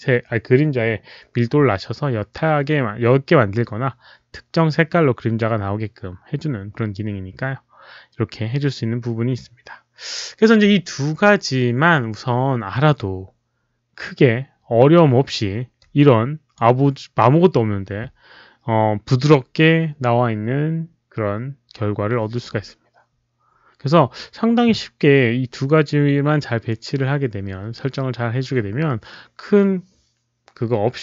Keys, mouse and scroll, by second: 15.7 click.